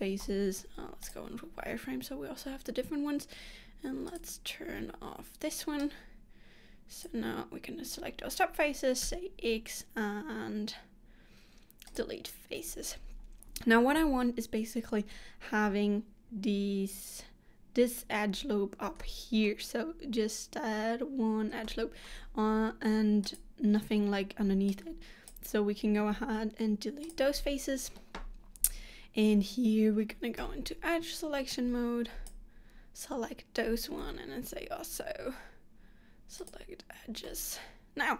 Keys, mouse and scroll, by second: 0.3 z, 4.2 click, 5.9 click, 9.2 x, 19.1 middle click, 21.7 middle click, 23.4 click, 24.8 click, 26.1 x, 30.6 2, 31.6 click, 34.2 x, 37.4 middle click.